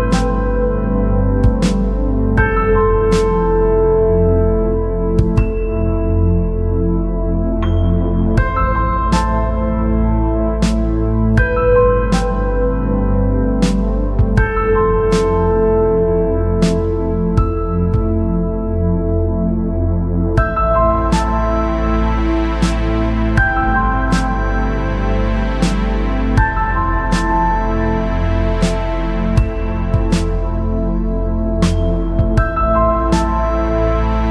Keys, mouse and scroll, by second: 9.0 middle click, 9.8-11.6 drag, 11.4 ctrl+s, 14.3-17.4 middle drag, 15.7 e, 24.0 e, 29.3-30.7 middle drag, 30.7 e.